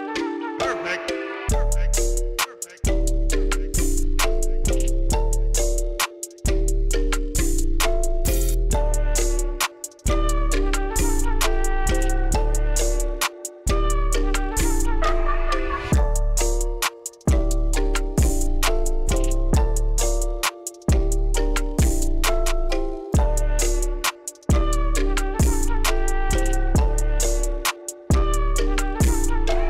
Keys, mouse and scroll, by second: 0.3 F8, 1.4 click, 4.7 click, 5.4 click, 7.2 click, 10.4 click, 17.6 click, 19.3 click, 20.1-22.9 drag, 23.6-24.2 middle drag, 26.4 click, 27.1 scroll down 1, 27.8-28.5 scroll down 1, 28.8-29.4 scroll up 2.